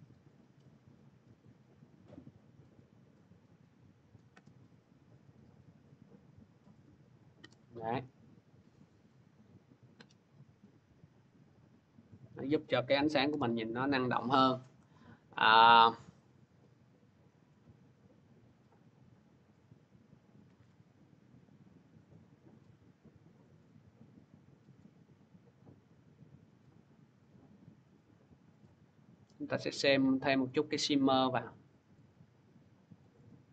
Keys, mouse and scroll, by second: 1.3 click, 3.9-7.2 drag, 8.5 click, 9.2 scroll, 13.5 scroll, 15.6 click, 17.8-18.1 scroll, 18.3 middle click, 18.6-20.6 scroll, 22.0-22.8 scroll, 24.6 click, 27.8 click, 29.1 click, 30.3 click, 32.8 click.